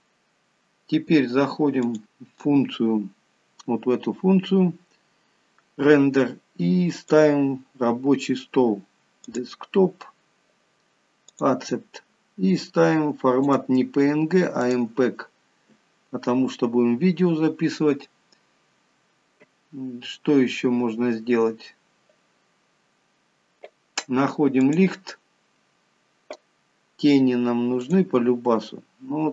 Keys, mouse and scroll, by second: 2.1 click, 7.2 click, 12.4-13.2 scroll down 5, 13.7 click, 24.8 click, 28.1 click.